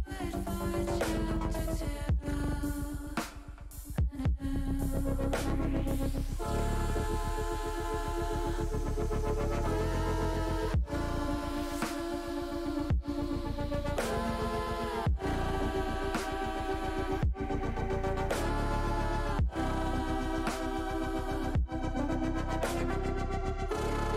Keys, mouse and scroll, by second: 0.0 ctrl+r, 1.8 click, 2.5-4.7 middle drag, 5.3-6.8 middle drag, 7.1 middle click, 7.9 middle click, 8.5 middle click, 10.1 alt+shift+click, 10.6 middle click, 11.5 middle click, 12.9 middle click, 13.5 shift+middle click, 13.9 middle click, 15.7 middle click, 16.5 middle click, 17.4 shift+middle click, 19.2 middle click, 19.9 middle click, 22.5-24.1 drag.